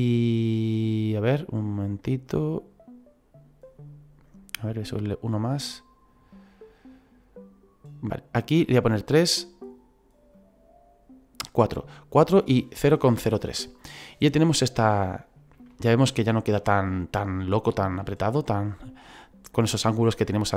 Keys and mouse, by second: 0.1 click, 1.7 click, 4.2 click, 6.7 click, 9.2 click, 10.3 click, 14.0 middle click, 15.7 shift+middle click, 16.9 middle click, 18.2 middle click.